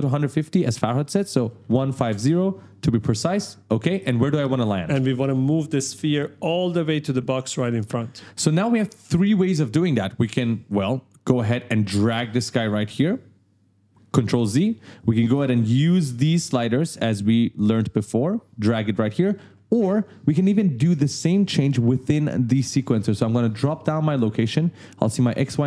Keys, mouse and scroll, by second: 1.6 5, 1.8 0, 2.1 Return, 11.3 click, 14.1 ctrl+z, 16.9 click, 19.3 ctrl+z, 23.5 click.